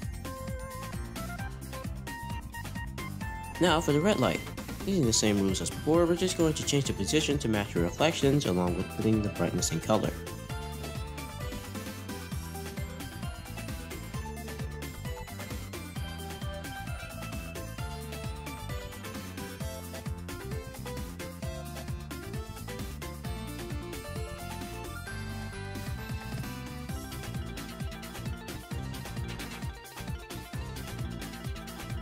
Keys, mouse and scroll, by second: 0.1 r, 2.2 r, 8.8-9.2 scroll up 2, 9.9-10.5 scroll down 1, 10.5 click, 11.1 click, 13.6 shift+a, 14.9 r, 22.6 scroll down 2, 22.7 middle click, 23.1-24.0 scroll up 1, 24.0-24.4 scroll up 3, 24.7 middle click, 25.2 click, 28.3 r.